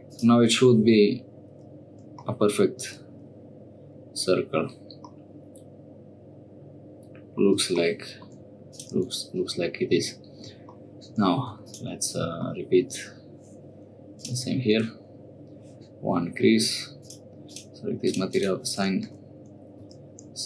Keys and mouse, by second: 0.1-1.3 drag, 2.9-5.1 middle drag, 5.1-7.4 drag, 8.7 click, 9.0 Tab, 11.4 3, 11.6 click, 14.1-15.3 drag, 17.0 click, 17.4 click, 18.0 click, 18.3 click, 19.1 Tab, 19.8 Tab, 20.4 3.